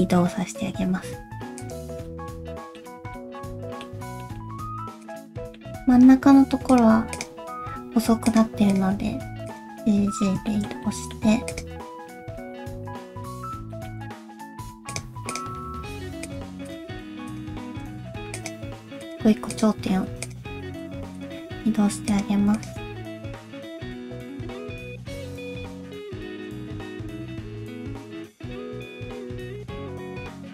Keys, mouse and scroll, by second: 2.0 middle click, 2.8-3.1 scroll down 2, 3.1 middle click, 4.2 shift+middle click, 4.4 shift+scroll up 3, 5.0 click, 5.3 middle click, 5.7 g, 7.1 click, 7.4 g, 8.7 click, 8.9 g, 9.8 scroll down 1, 9.8 middle click, 10.5 shift+middle click, 10.8 middle click, 11.5 click, 12.1 KP_3, 12.6-13.0 scroll up 1, 13.2 alt+z, 13.7 shift+middle click, 14.0 g, 15.3 click, 15.6 g, 16.6 click, 16.8 g, 17.6 shift+middle click, 18.3 click, 18.6 g, 19.5 click, 19.9 g, 20.6 shift+middle click, 20.8-21.1 scroll up 2, 21.1 click, 21.4 g, 22.5 click, 22.8 g, 23.4 click, 23.5 g, 23.9 click, 24.1 g, 24.5 click, 24.6 g, 25.1-25.6 scroll down 4, 25.4 alt+z, 25.6 middle click, 26.1 shift+middle click, 26.2 scroll down 2, 26.3 middle click, 27.1 scroll down 1, 27.3 shift+middle click, 27.5 middle click, 27.8 shift+middle click, 28.1 click, 28.3 click, 28.9 ctrl+KP_1, 29.1 scroll up 2, 29.4 shift+middle click, 29.5 g, 30.1 scroll down 2, 30.2 middle click.